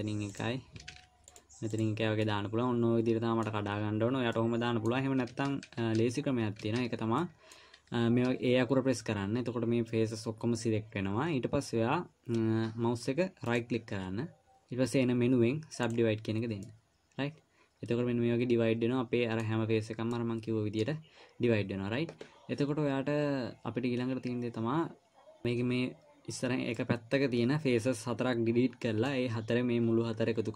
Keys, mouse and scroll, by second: 1.3 ctrl+r, 2.6 middle click, 4.7 middle click, 5.9 ctrl+z, 6.2 ctrl+z, 7.1 ctrl+z, 7.6 middle click, 8.6 a, 13.9 right click, 17.0 middle click, 20.5 middle click, 27.1 middle click.